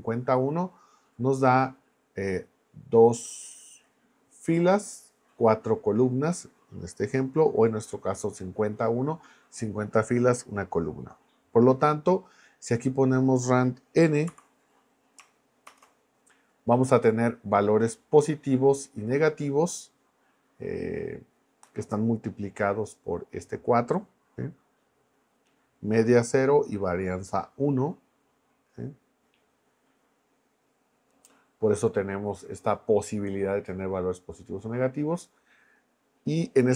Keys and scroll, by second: 14.3 n, 15.7 shift+Return.